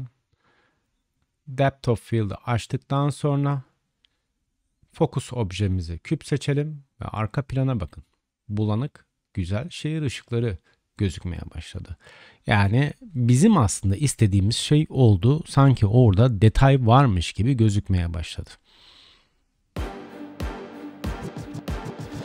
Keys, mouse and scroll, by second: 2.0 click, 3.8-4.9 drag, 15.7-22.2 drag.